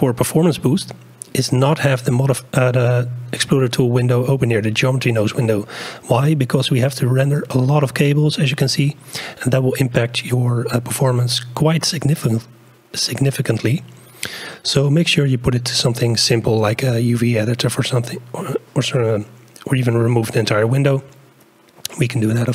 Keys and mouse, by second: 0.9 click, 1.2 middle click, 5.8 click, 6.2 middle click, 10.3-15.9 drag, 15.9 middle click, 21.9-22.5 drag.